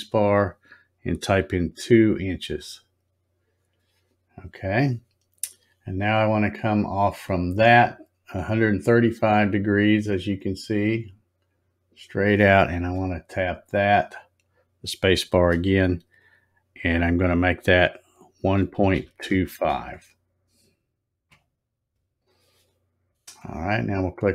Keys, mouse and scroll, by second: 15.3 space.